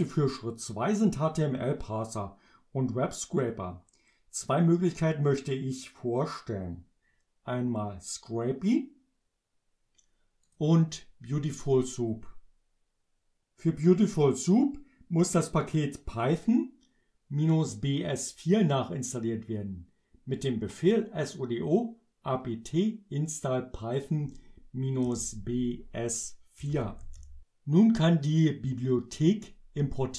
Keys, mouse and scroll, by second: 10.5 click, 23.9 click, 25.1 Return, 26.4-27.7 typing, 28.7-30.1 drag.